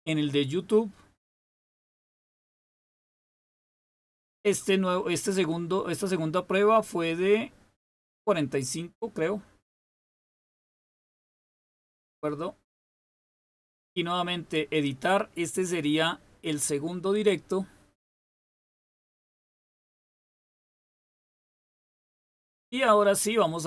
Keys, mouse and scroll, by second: 1.2 click, 13.4 click, 18.7 click, 23.1 click.